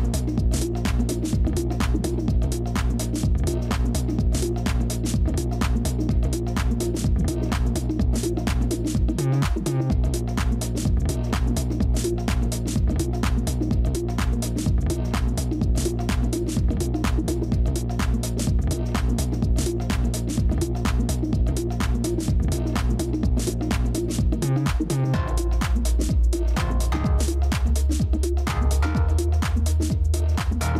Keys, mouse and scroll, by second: 0.0 ctrl++, 0.2 ctrl++, 0.6 space, 3.0 ctrl+z, 7.5 ctrl+-, 7.7 ctrl+-, 8.3 space, 11.6 ctrl+], 12.0 ctrl+], 14.3 ctrl+-, 14.8 space, 20.4 right click.